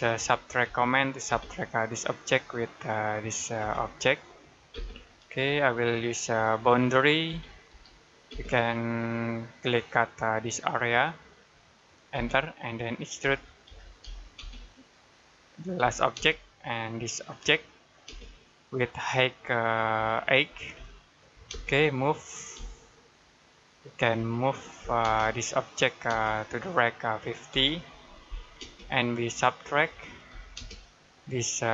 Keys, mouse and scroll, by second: 0.0 typing, 1.1 space, 1.9 click, 3.4 space, 3.9 click, 5.4 middle click, 6.4 middle click, 7.1-8.1 typing, 9.6 click, 12.0 space, 13.1 e, 14.2 space, 15.7 l, 16.0 space, 17.1 click, 17.9 space, 20.6 8, 21.3 space, 22.4 m, 24.0 Escape, 24.6 m, 24.9 space, 25.3 click, 25.9 space, 26.1 click, 27.4 typing, 28.4 space, 29.7-30.4 typing, 31.0 scroll up 1.